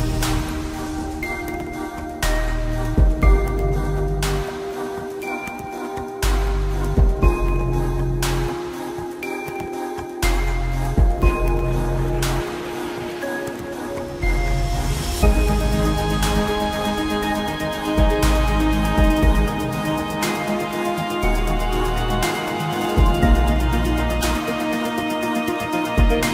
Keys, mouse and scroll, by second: 7.8 shift+middle click, 12.2 Escape, 16.5 shift+middle click, 20.4 g.